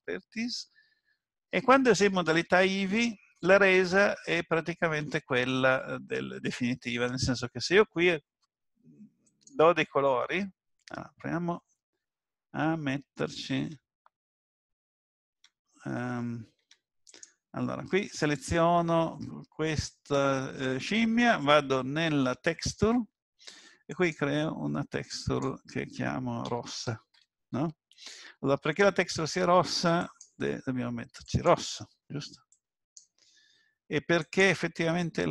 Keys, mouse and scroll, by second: 3.8 shift+middle click, 9.3 click, 13.5 Tab, 15.3 Tab, 16.6 Tab, 17.1 click, 22.5 click, 23.9 click, 27.0 s, 30.0 click.